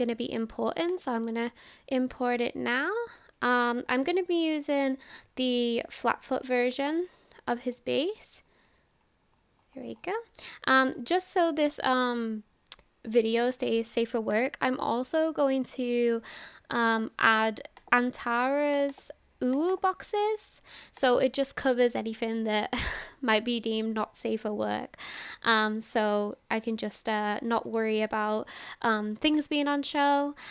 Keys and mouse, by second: 0.9 click, 10.3-10.8 middle drag, 14.4 click, 26.0-26.4 shift+middle drag, 26.7 shift+middle drag, 27.1-27.5 middle drag, 27.9 shift+middle click, 28.2 middle click.